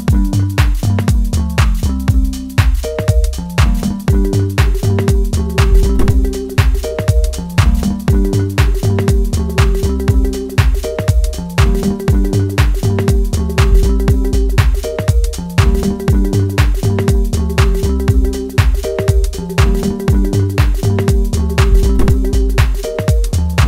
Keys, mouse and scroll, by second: 1.0-4.4 middle drag, 4.4-9.2 drag, 9.2-11.2 middle drag, 11.2-11.7 scroll down 1, 11.7-13.6 middle drag, 13.6 click, 18.2 shift+middle click, 19.4 scroll up 1, 20.0 shift+middle click, 21.0 click.